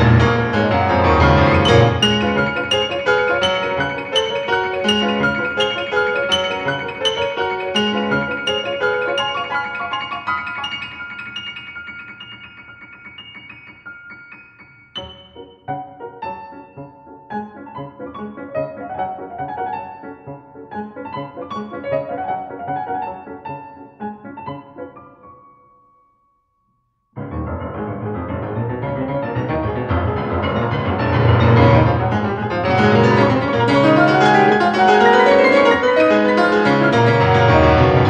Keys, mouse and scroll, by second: 7.1 click, 11.0 click, 11.9 click, 12.0 click.